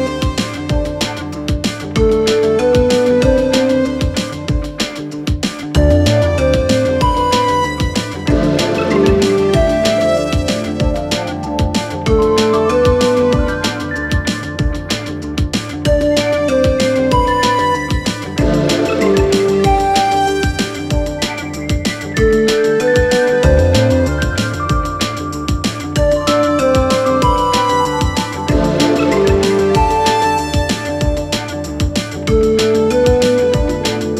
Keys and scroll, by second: 0.9 ], 8.2 ctrl+z, 23.1 4, 25.9 3, 26.4 ], 27.2 4.